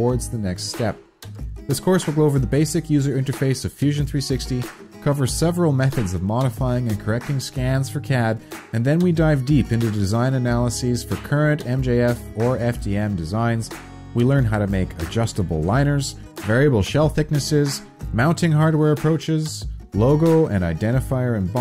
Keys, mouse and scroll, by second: 1.6 ctrl+s, 1.6 click, 14.1 click, 14.1 s, 16.8 4, 18.1 Return.